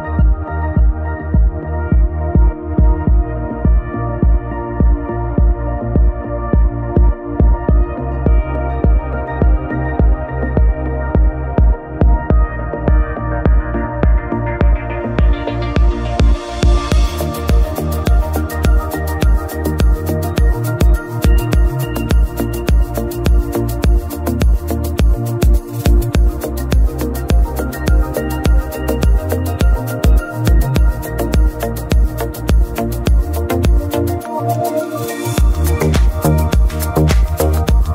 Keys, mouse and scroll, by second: 2.4 ctrl+right click, 6.1 m, 12.0 scroll down 1, 12.2-25.6 middle drag, 25.6 ctrl+shift+click, 26.4 ctrl+shift+click, 27.0-33.7 middle drag, 33.7 x, 35.9 click, 36.8 alt+click, 37.8 x.